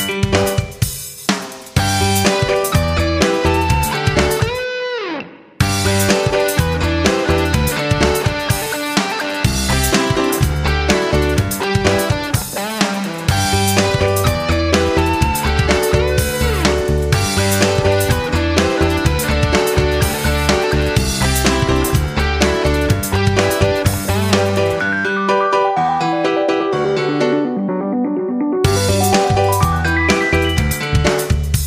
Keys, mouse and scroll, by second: 4.0 F9, 5.1 click, 14.6 click, 17.6 F9, 18.6 click, 19.1 shift+click, 25.9 shift+click.